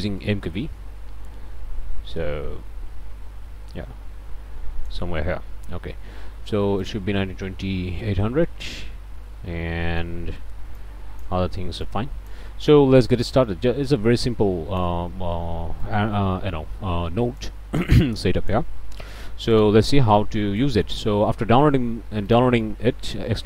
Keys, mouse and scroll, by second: 6.8 click, 7.7 KP_8, 8.0 KP_0, 8.4 KP_Enter, 9.7 click, 10.7 click, 11.8 click, 13.2-15.0 drag, 15.8-17.6 drag, 18.0 click, 18.8 click, 19.5 click, 20.2 click, 22.3 click.